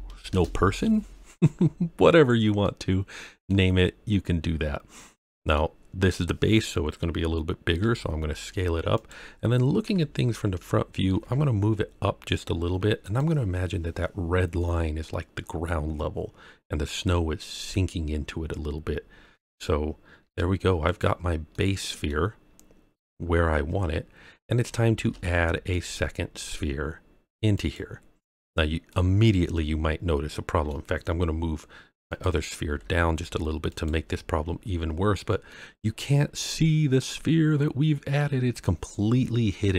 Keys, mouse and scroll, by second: 1.7-2.4 scroll down 3, 2.6-3.4 middle drag, 4.0-4.6 scroll up 2, 4.6-5.0 scroll down 2, 5.1-5.5 middle drag, 7.8 s, 8.9 click, 9.8 KP_1, 11.1 g, 13.0 click, 20.2 g, 20.2 z, 20.8 click, 21.5-22.0 middle drag, 22.4 scroll up 1, 23.6-24.4 scroll down 3, 25.0 shift+a, 28.9-30.6 middle drag, 32.0 click, 32.6 g, 32.7 z, 33.7 click, 34.7-35.1 scroll up 2, 35.4-38.2 middle drag.